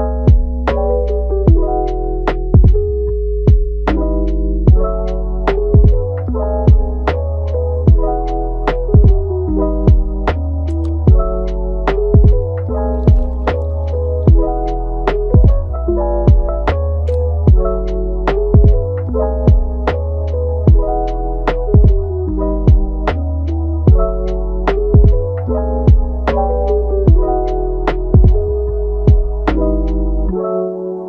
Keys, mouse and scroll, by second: 2.7-3.2 scroll down 1, 3.2 scroll up 2, 3.4 scroll down 1, 3.6-4.1 middle drag, 4.1-4.5 scroll down 6, 4.5 scroll up 1, 4.5-7.3 middle drag, 7.3-7.9 scroll up 5, 7.9-8.4 middle drag, 8.4-9.0 scroll up 4, 9.0 g, 10.1-10.8 middle drag, 10.8-11.1 scroll down 5, 11.1-11.5 middle drag, 11.5 g, 12.2-13.1 middle drag, 13.1-13.8 scroll up 1, 13.8 Tab, 14.5 Tab, 16.2 click, 17.3-18.7 middle drag, 18.7 KP_1, 19.2-19.7 scroll down 5, 19.7 shift+middle click, 20.1 scroll up 3, 20.4 shift+middle click, 21.0 click, 21.8 g, 23.6 click, 24.0 g, 25.2 click, 25.5 g, 26.7 click, 27.0 g, 28.0 click, 29.6 click, 29.8 g.